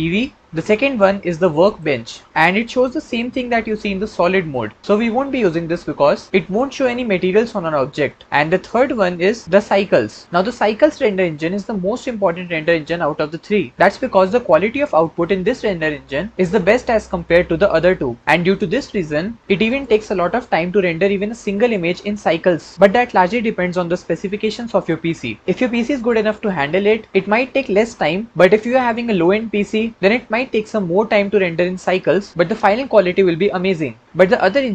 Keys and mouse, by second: 0.5 ctrl+z, 9.0-10.2 drag, 17.2-19.6 drag, 34.6 click.